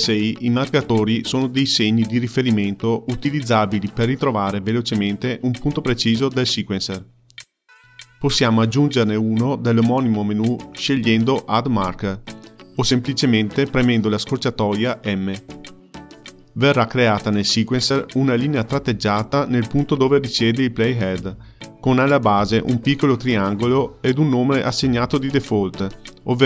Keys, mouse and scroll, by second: 4.6-9.1 drag, 12.2-13.9 drag, 14.7 m, 15.5-17.5 drag, 18.0 m, 18.5-20.2 drag, 22.1 m, 22.6 click, 23.0-24.6 drag, 24.6 m.